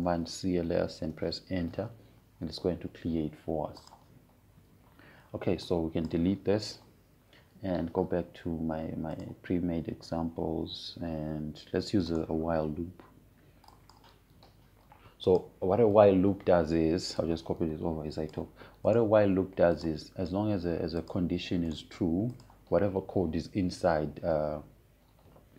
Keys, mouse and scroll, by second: 1.1-2.1 typing, 2.7 Return, 5.5 click, 8.4 BackSpace, 10.9 click, 13.8 right click, 15.3-20.6 drag, 20.6 right click, 21.3 click, 23.4 right click, 24.0 click.